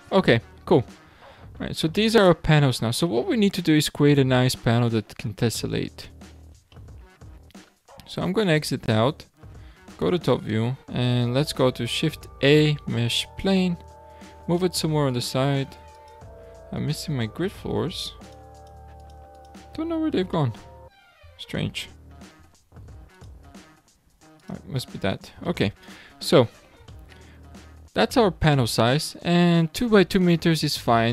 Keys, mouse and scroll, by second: 0.4 a, 1.1 alt+a, 1.5-1.9 scroll down 2, 1.9-2.5 shift+middle drag, 2.5-5.0 scroll up 15, 5.0-6.7 scroll down 14, 6.7-8.5 shift+middle drag, 8.5 Tab, 9.8 `, 10.8-11.5 scroll down 2, 11.5 shift+a, 14.3 g, 15.9-20.3 drag, 20.3-21.7 middle drag, 21.7 `, 22.5 `, 24.3-25.0 drag, 25.0-25.4 scroll up 5, 25.4 shift+middle click, 26.2-26.9 scroll up 5, 26.9 shift+middle click, 27.6-30.7 scroll up 5.